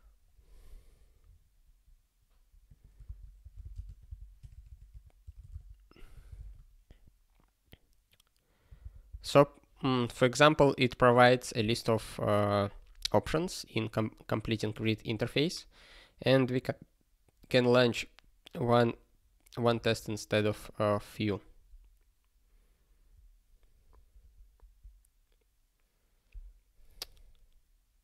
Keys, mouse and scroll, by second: 2.7 click, 3.0 Return, 3.4-4.9 typing, 6.4 ctrl+s, 8.8 super+b.